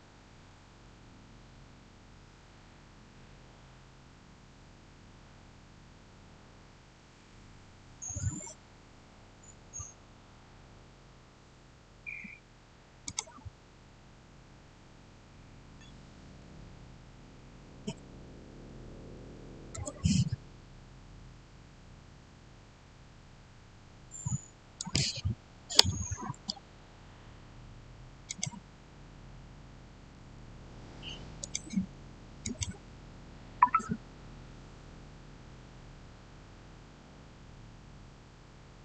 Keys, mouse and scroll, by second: 12.9 click, 17.3-19.6 typing, 24.6 Return, 24.6 click, 28.1 click, 30.0 Return, 31.3 click.